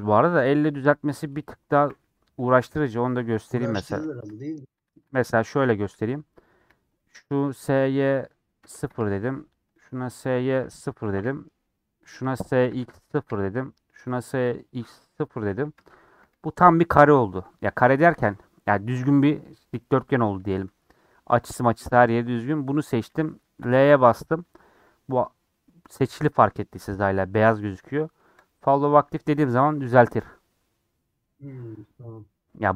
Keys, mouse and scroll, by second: 2.0 n, 2.7 ctrl+z, 6.2 click, 7.5 s, 10.6 s, 12.7 s, 14.7 click, 15.1 shift+click, 15.5 s.